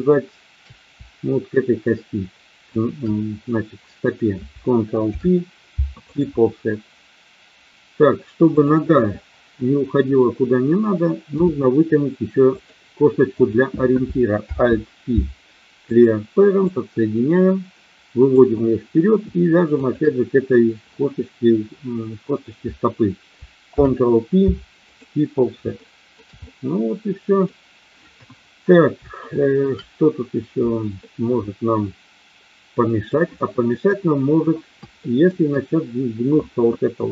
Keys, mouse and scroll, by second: 2.6 shift+click, 5.0 ctrl+p, 11.4 e, 12.5 click, 13.3 click, 14.4 alt+p, 16.6-18.4 drag, 19.8 shift+click, 23.6 ctrl+p, 25.8 shift+middle click, 26.4-27.5 middle drag, 28.1 KP_1, 29.3 shift+middle click, 30.9-33.1 middle drag, 33.8 KP_1, 35.0 shift+middle click, 36.9 click.